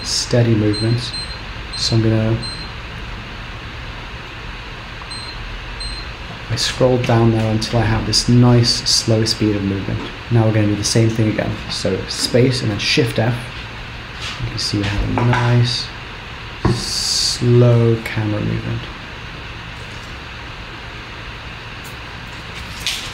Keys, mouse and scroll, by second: 12.2 space, 12.9 shift+f.